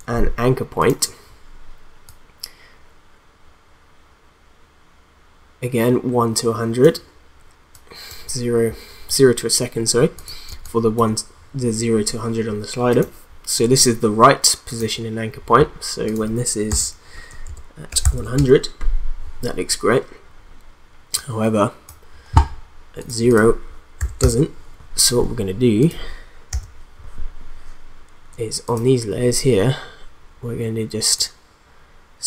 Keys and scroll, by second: 10.5 space, 16.7-18.5 typing, 24.0 0, 24.2 Return, 26.5 u.